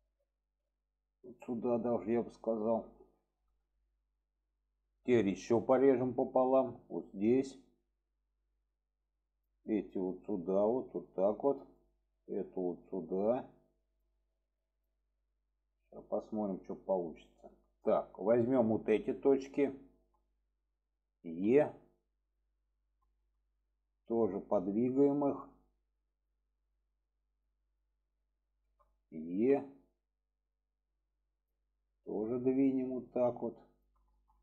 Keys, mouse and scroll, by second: 1.3-2.7 drag, 3.0 shift+middle drag, 3.8 shift+middle drag, 5.8 click, 6.7 click, 9.7-10.0 drag, 10.6-11.7 drag, 12.3 drag, 12.9-14.0 drag, 14.6 click, 15.3-16.5 drag, 17.2 shift+middle drag, 18.3-19.0 drag, 19.4-19.9 shift+drag, 21.2 e, 23.0 middle click, 23.9 click, 24.7-25.4 drag, 26.0 click, 26.6 click, 28.3 shift+click, 29.3 e, 32.0-32.3 drag, 32.7-33.8 drag, 34.1 shift+middle drag.